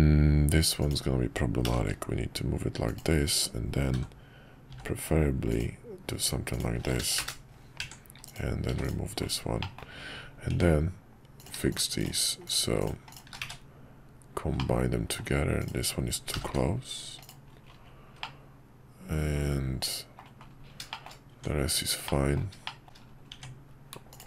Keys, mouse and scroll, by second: 1.7 g, 3.9 j, 6.9 k, 7.8 Tab, 8.7 x, 9.6 middle click, 10.5 Tab, 11.4 click, 12.5 click, 13.5 1, 14.6 middle click, 15.2-15.6 scroll down 1, 15.6 click, 16.3 g, 18.3-20.2 middle drag, 20.9 shift+middle click, 21.3 Tab, 22.0 middle click, 22.7 middle click, 23.3 Tab.